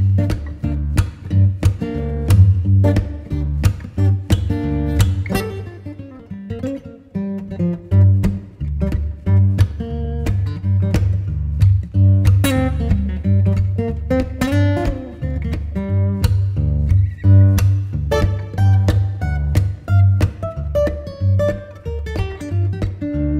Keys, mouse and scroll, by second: 1.4 ctrl+shift+click, 4.5 Return, 7.5 click, 7.8 right click, 8.4 Tab, 9.1 scroll down 1, 9.4 right click, 9.9 Tab, 10.3 scroll up 1, 10.5 right click, 11.1 scroll up 1, 11.2 right click, 11.9-15.4 ctrl+shift+drag, 15.5 Tab, 15.9 right click, 16.9 scroll down 1, 17.0 scroll up 1, 17.2 right click, 17.7 Tab, 18.0 scroll up 1, 18.7 ctrl+shift+click, 21.7 Tab, 22.0-23.3 right drag.